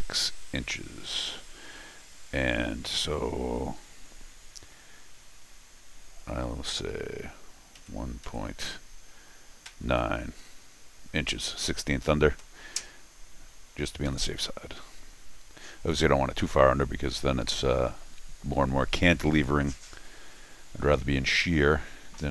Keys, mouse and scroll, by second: 14.1 Escape.